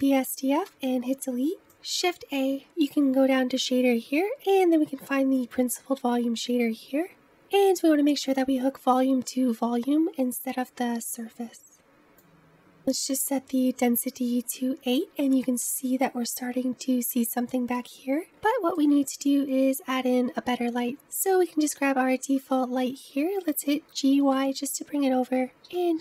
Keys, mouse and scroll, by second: 0.7 Delete, 9.4-14.5 drag, 14.5-15.2 scroll up 1, 15.2-17.3 middle drag, 17.3-18.2 scroll down 3, 18.2 scroll up 1, 18.3 shift+middle click, 19.0-19.8 scroll down 1, 19.8-21.3 scroll down 3, 21.3 click, 21.7 middle click, 22.3-24.0 scroll down 3, 24.0 g, 25.7 g.